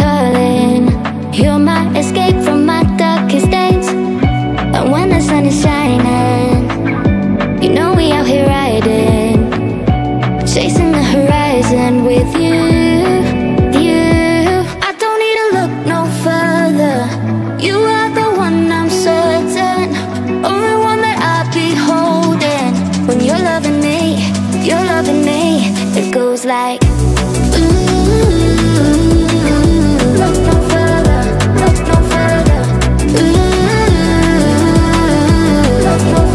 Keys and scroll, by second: 21.8 Down, 22.6 Up.